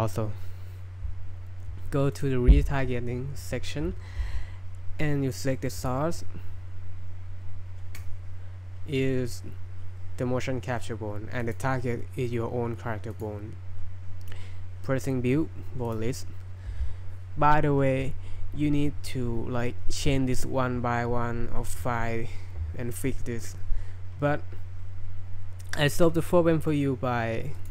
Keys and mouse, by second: 2.2 click, 5.8 click, 11.5 click, 27.6 click.